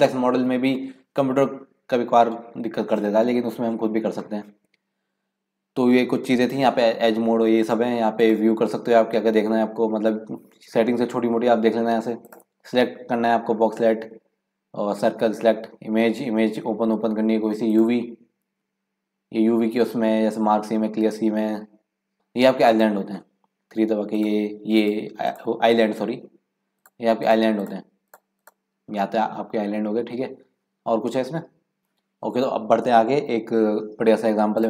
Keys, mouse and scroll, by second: 8.3-11.4 drag, 12.1-15.4 drag, 17.8-20.7 drag, 22.6 click, 24.2 click, 24.8 click, 25.3 click, 26.7 click, 27.3 click, 27.6 click, 28.5 click.